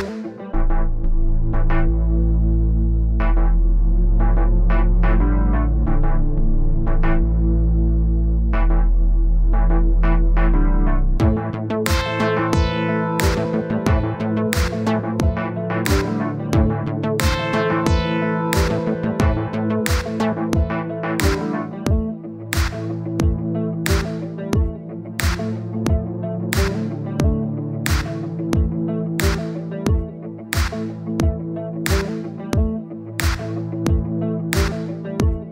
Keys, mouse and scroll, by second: 0.2-1.4 middle drag, 3.1 click, 3.6 click, 4.0-6.1 drag, 6.5 click, 7.1-9.3 drag, 9.9 click, 10.6 click, 10.8-12.1 middle drag, 14.0-15.0 drag, 15.0-16.3 middle drag, 16.3 click, 16.5 click, 17.3 click, 18.1-19.3 middle drag, 19.9 n, 20.3 n, 21.0 click, 21.4 middle click, 22.0-22.4 scroll up 1, 22.4 scroll down 1, 22.5-23.8 middle drag, 23.9-27.7 drag, 28.0-31.0 drag, 31.0 middle click, 31.7-33.1 drag, 33.1 middle click, 33.5-34.6 drag, 34.6 middle click, 34.8-35.5 drag.